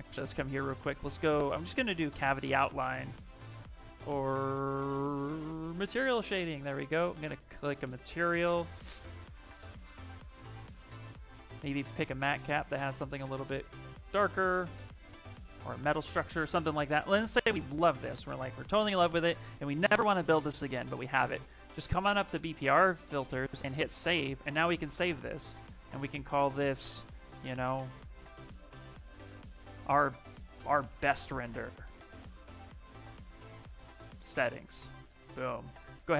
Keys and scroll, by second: 26.8 ctrl+a, 27.4 shift+o, 28.6-35.6 typing, 29.4 Caps_Lock.